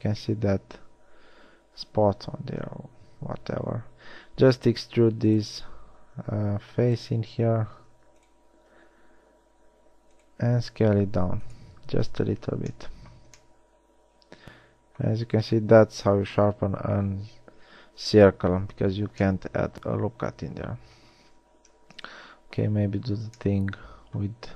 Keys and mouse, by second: 2.2 Tab, 3.5 KP_3, 5.3 e, 6.5 s, 9.0 z, 10.9 e, 10.9 s, 12.7 Tab, 13.6 z, 21.7 Tab, 23.9 middle click.